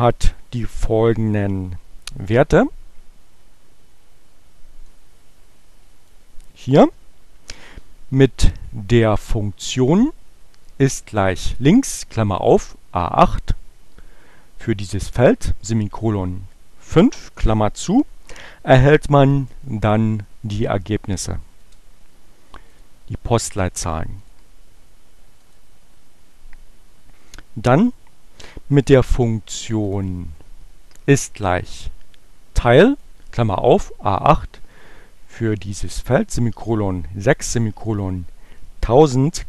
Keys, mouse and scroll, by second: 3.0-6.3 drag, 8.8 click, 10.6-11.8 drag, 21.8 Return, 22.5 click, 23.6 click, 24.2 click, 24.9 click, 29.9 click, 31.8-33.2 drag.